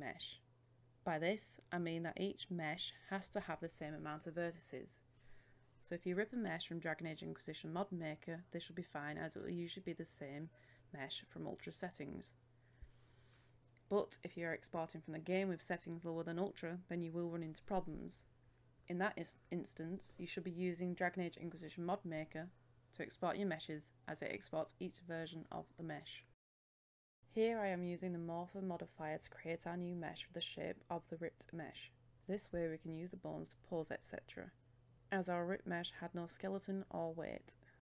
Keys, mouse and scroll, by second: 8.5 KP_1, 8.7 KP_0, 10.4 click, 11.3-12.9 scroll up 1, 13.6-14.7 middle drag, 15.0 click, 17.5 typing, 19.7-25.3 drag, 25.3 KP_1, 25.4 KP_0, 27.2 click, 29.5-30.6 typing, 30.9 Return, 32.4-35.7 drag.